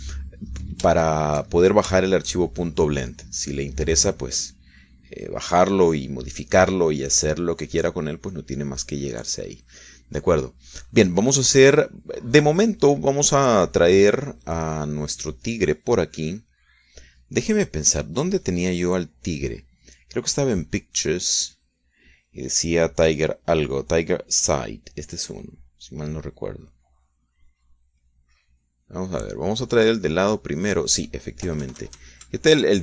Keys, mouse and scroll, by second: 0.2 click, 2.3-4.3 shift+middle drag, 6.4-7.8 drag, 9.7-11.0 drag, 12.1 click, 14.3 click, 16.1 click, 21.6 click, 29.2 click, 31.3 click.